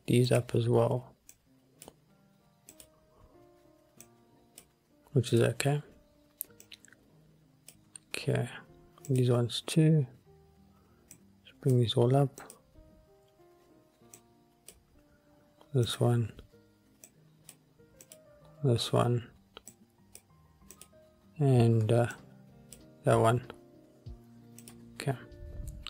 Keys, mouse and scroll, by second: 0.4 click, 1.5 click, 2.8 click, 4.1 click, 5.5 click, 6.7 click, 9.2 click, 11.3 click, 12.5 click, 14.3 click, 16.0 click, 17.2 click, 18.1 click, 19.8 click, 20.9 click, 22.3 click, 24.7 click, 25.4-25.8 scroll up 1.